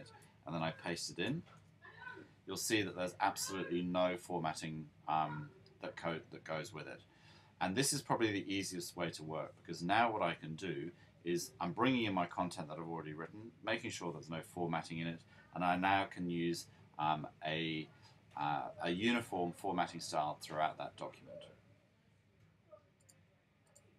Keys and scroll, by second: 1.4 super+v.